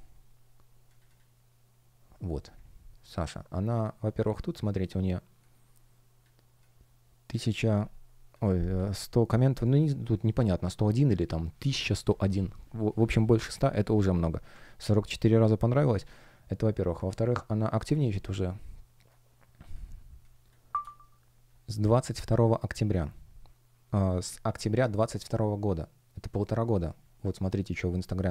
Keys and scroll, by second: 14.4 Escape, 20.6 space.